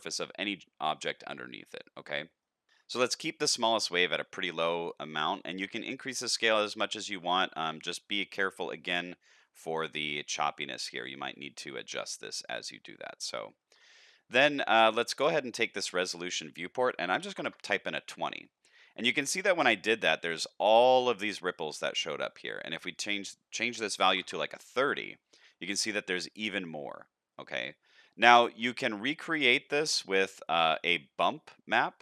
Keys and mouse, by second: 0.9 shift+middle drag, 1.8-2.4 middle drag, 5.2-8.8 shift+drag, 10.2-13.7 shift+drag, 16.3-18.0 drag, 18.4-19.1 middle drag, 19.6-20.2 shift+middle drag, 20.4-20.8 middle drag, 21.0-21.4 shift+middle drag, 23.0-24.6 drag, 25.6-26.1 shift+middle drag, 26.4-27.3 middle drag, 28.0-28.5 middle drag, 29.4-29.8 shift+middle drag, 30.0 middle drag, 30.6 shift+middle drag.